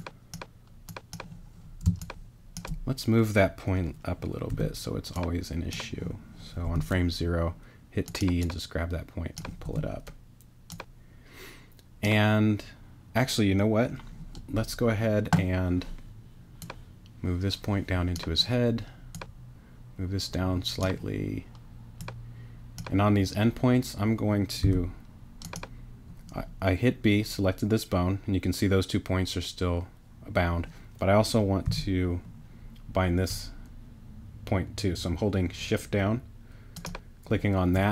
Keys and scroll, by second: 1.8 space, 4.5 t, 6.6 t, 9.6 t, 24.6 b, 31.6 g.